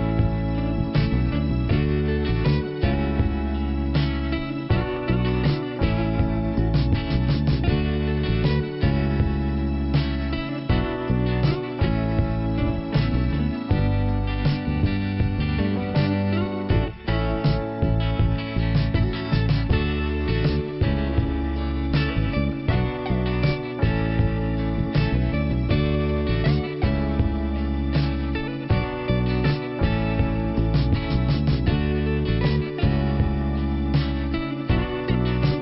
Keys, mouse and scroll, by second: 1.5-2.6 scroll down 1, 3.3 click, 4.9 click, 7.1 click, 7.3 double click, 8.2 double click, 8.3 double click, 8.4 double click, 9.2 scroll up 4, 10.8 click, 12.0 click, 16.0 click, 18.2 click, 19.0 scroll down 2, 19.4 click, 21.6 click, 22.1 click, 22.4 click, 23.4 click, 24.3 click, 27.5-28.1 scroll up 1, 28.6 click, 29.5 click, 30.0 click, 30.7 click, 31.3 click, 32.2 click, 32.7 scroll down 1, 34.7 alt+f, 35.4-35.6 scroll up 1.